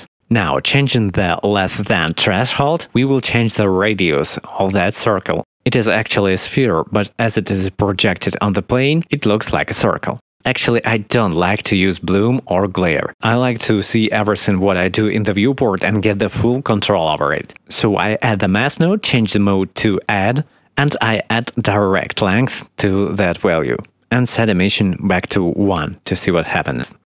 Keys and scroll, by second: 17.3 shift+d, 24.7 x.